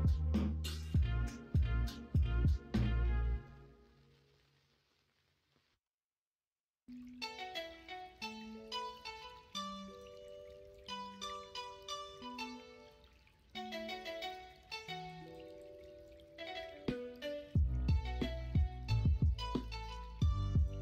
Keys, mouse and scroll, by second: 0.2 p, 3.5 Tab, 4.1 Tab, 11.9 2, 13.6 shift+d, 16.9 s, 19.7 1.